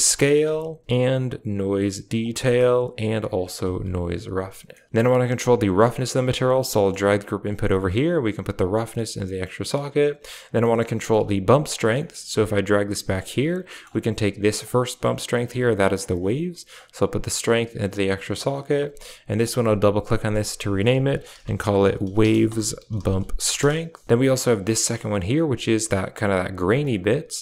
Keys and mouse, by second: 1.1 click, 1.5-3.8 drag, 5.9 middle click, 6.0 g, 6.6 middle click, 6.9 g, 8.5-9.4 drag, 10.5 middle click, 11.1 g, 11.9 middle click, 12.1 g, 13.6 middle click, 14.5-15.9 drag, 16.7-17.7 drag, 19.3 click, 19.5-23.5 drag, 24.5 click, 25.2-26.6 drag.